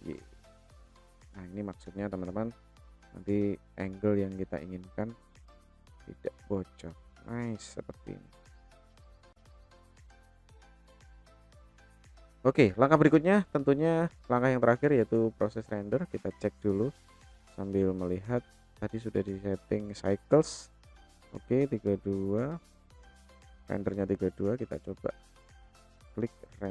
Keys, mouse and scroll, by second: 1.8 KP_0, 5.4 click, 6.0-7.3 middle drag, 8.1-9.2 shift+middle drag, 9.4 middle click, 10.4 shift+middle click, 12.5 click, 15.8 click, 18.7 click, 25.7-26.7 drag.